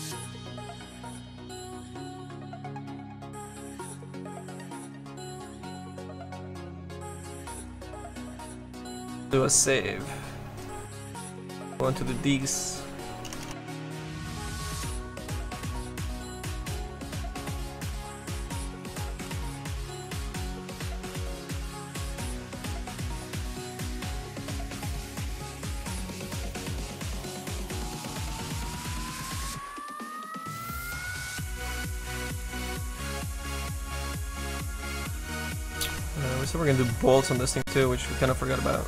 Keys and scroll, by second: 13.4 BackSpace, 13.7 d.